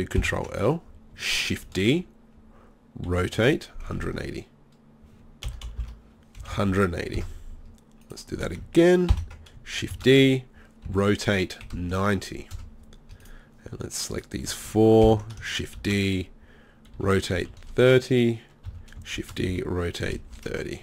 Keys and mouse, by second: 0.2 ctrl+l, 1.5 shift+d, 8.0-9.1 right drag, 9.1 ctrl+l, 9.9 shift+d, 13.2-15.1 drag, 15.1 ctrl+l, 15.8 shift+d, 19.2 shift+d.